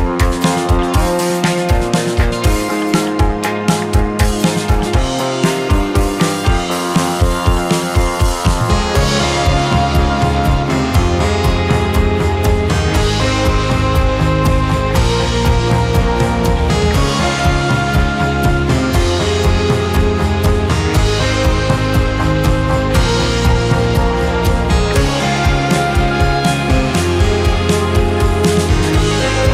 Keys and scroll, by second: 0.7 space, 5.9 Delete, 7.6 Delete, 8.7 Delete, 9.0 Delete, 9.3 Delete, 9.8 Delete, 12.6 space, 14.3 space, 15.9 space, 19.6 KP_8, 19.8 KP_0, 20.8 space, 23.2 space, 26.2 KP_0, 26.3 Return, 26.9 space, 29.4 space.